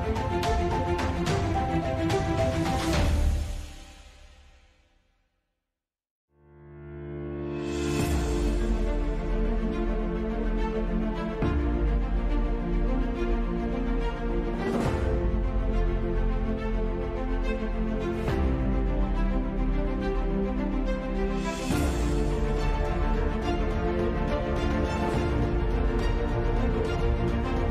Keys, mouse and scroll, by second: 1.3 click, 2.5 click, 2.5 g, 3.3 g, 3.7 click, 4.2 click, 4.5-6.3 drag, 4.5 g, 5.8 x, 6.5 click, 6.8 ctrl+z, 6.9 ctrl+z, 7.2 click, 7.5 g, 8.1-9.5 drag, 8.2 g, 9.5 g, 9.6 g, 10.7 click, 11.5 z, 11.9 z, 12.2 g, 13.6 g, 14.6 Tab, 15.3 click, 16.1 middle click, 16.7 click, 17.7 middle click, 18.3-19.9 drag, 19.9 ctrl+2, 20.9-21.4 drag, 21.4-22.0 drag, 22.2 click, 22.8-24.7 middle drag, 24.9-25.9 drag, 25.9 ctrl+s, 25.9-27.5 typing.